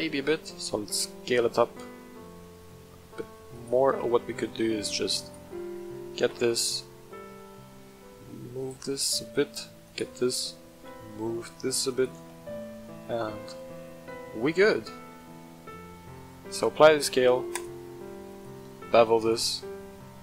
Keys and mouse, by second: 0.0 s, 3.5 shift+click, 4.0 Tab, 4.6 middle click, 5.1 alt+click, 5.5 middle click, 6.1 g, 6.5 x, 7.2 y, 8.6 shift+click, 8.9 click, 9.8 alt+click, 10.7 g, 10.8 y, 11.9 shift+click, 12.3 Tab, 12.5-13.0 middle drag, 13.5-14.7 middle drag, 16.4 ctrl+a, 18.2-19.3 right drag, 19.3 ctrl+a, 19.6-19.9 middle drag.